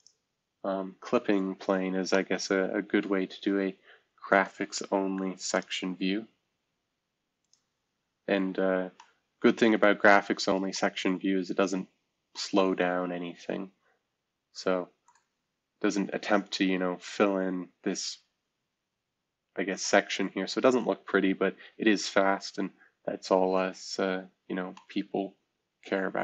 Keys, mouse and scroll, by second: 5.5 click, 8.3 middle drag, 8.5-9.6 scroll down 1, 8.9-10.3 middle drag, 11.2-12.3 scroll up 1, 15.4 scroll up 3, 16.5 scroll down 2, 18.8-19.8 scroll down 1, 20.5-21.3 scroll down 2, 21.3-21.9 scroll down 1, 21.9 scroll down 1, 22.1-24.0 scroll up 3, 24.2-24.7 scroll up 1, 24.7 middle click.